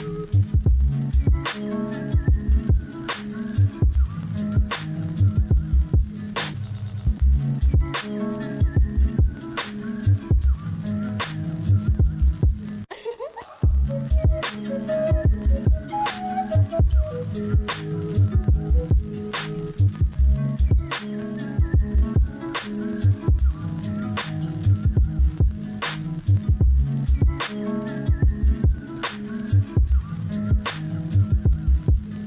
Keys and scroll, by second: 0.2 ctrl+z, 9.5 ctrl+z, 10.8 ctrl+z, 11.7 ctrl+z, 12.9 ctrl+z, 20.6 ctrl+z, 24.9 ctrl+z, 29.4 ctrl+z, 30.7 ctrl+z, 31.7 ctrl+z.